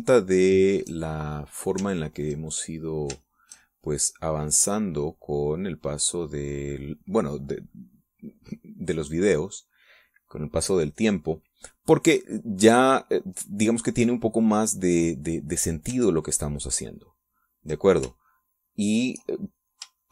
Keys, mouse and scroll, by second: 1.7 shift+click, 3.3 ctrl+click, 4.6 shift+click, 5.2-12.6 shift+drag, 12.9 middle click, 18.4 ctrl+click, 19.5-20.1 ctrl+shift+drag.